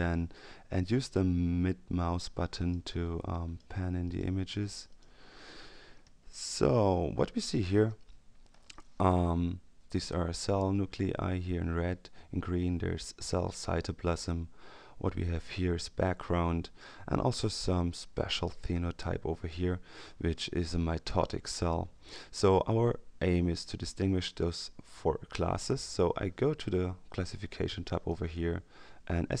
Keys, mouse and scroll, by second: 2.1-3.1 middle drag, 3.3 middle click, 4.9 middle click, 6.1-7.8 ctrl+scroll down 2, 27.9 click.